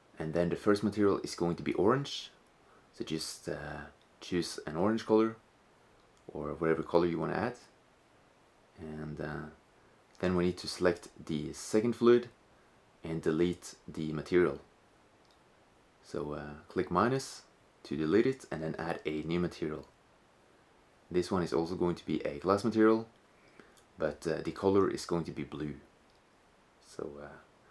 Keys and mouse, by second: 7.1 shift+z, 11.1-14.3 middle drag, 14.3-27.7 drag.